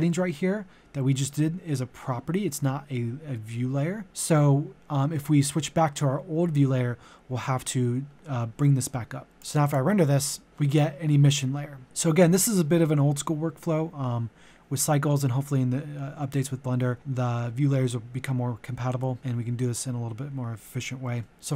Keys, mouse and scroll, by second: 9.3 click, 11.0-11.5 scroll down 1, 11.8-13.1 scroll up 1, 15.2-21.3 scroll up 1, 21.3 click.